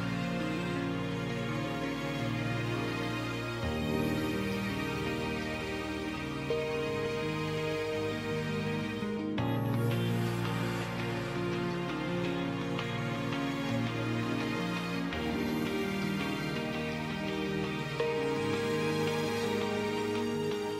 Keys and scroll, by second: 7.9 space, 10.6 space, 20.4 space.